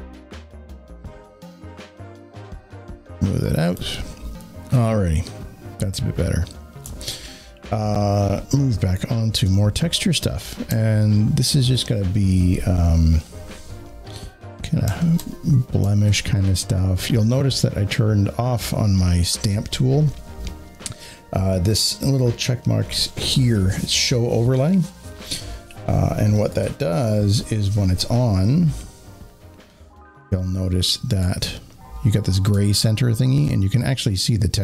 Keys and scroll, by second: 3.7 space, 3.8 space.